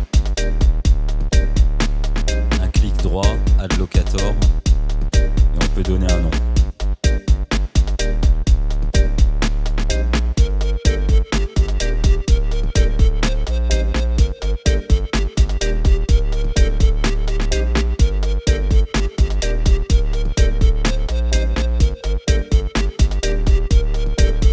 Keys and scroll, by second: 7.1 Return.